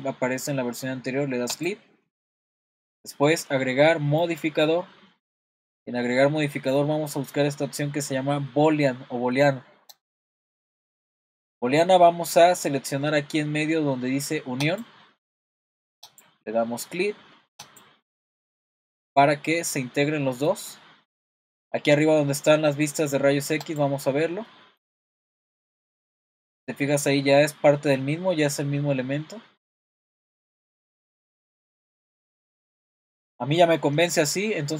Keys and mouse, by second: 1.6 click, 4.2-10.2 drag, 14.7 click, 16.1 click, 19.2-20.5 middle drag, 23.7 click, 24.5-24.8 middle drag, 26.6-30.2 middle drag, 31.3-31.8 middle drag, 32.9-33.3 shift+middle drag.